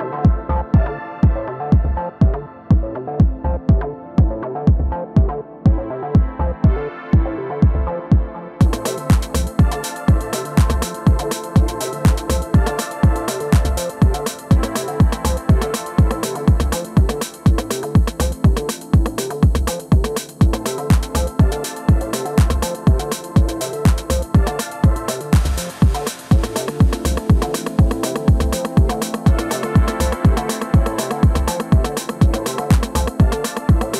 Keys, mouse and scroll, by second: 0.3 alt+w, 3.9-6.2 middle drag, 6.2-8.4 right drag, 7.2-8.4 middle drag, 7.8 g, 11.5 s, 13.0 g, 14.7-16.1 middle drag, 16.4 middle click, 16.6-18.3 right drag, 17.1 click, 17.6 middle click, 20.2 g, 22.2 middle click, 24.7 r, 28.9-30.9 drag, 30.3 middle click, 31.6 middle click.